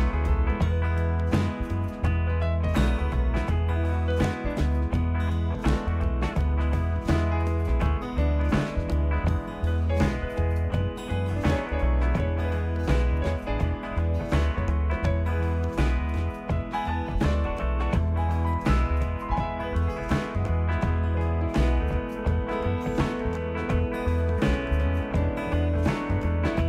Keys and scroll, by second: 18.2-18.7 typing.